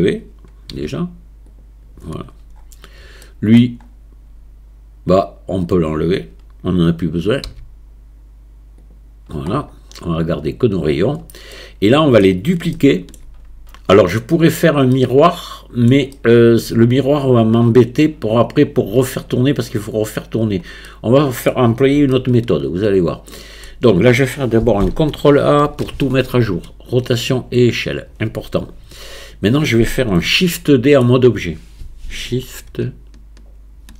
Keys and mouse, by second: 0.8 x, 3.2-3.6 middle drag, 5.5 click, 7.5 x, 10.9 click, 11.6-12.2 middle drag, 12.8-13.2 shift+middle drag, 15.0-15.9 middle drag, 16.2-16.6 shift+middle drag, 20.9 middle click, 22.2-23.7 shift+middle drag, 25.6 ctrl+a, 30.5 click.